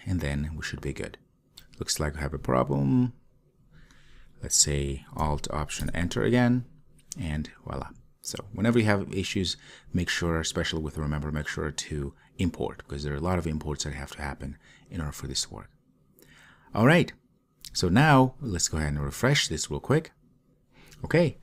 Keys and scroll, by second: 6.0 alt+Return.